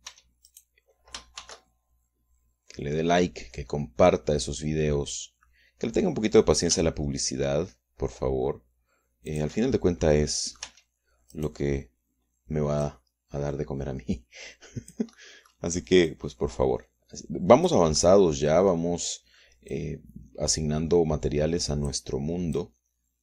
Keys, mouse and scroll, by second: 1.1 Tab, 1.5 click, 1.6 right click, 2.4 shift+d, 10.3 shift+click, 11.1 click, 11.7 Tab, 12.3 right click, 13.9-16.1 drag, 17.1-18.9 drag, 19.0 click, 19.1 middle click, 20.7-23.1 drag.